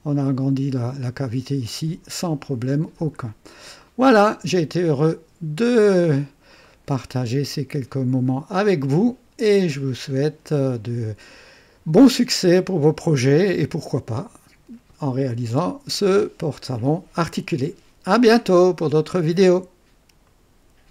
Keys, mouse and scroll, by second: 3.7-4.4 right drag, 4.8-6.2 drag, 6.6-7.7 right drag, 20.2 right click.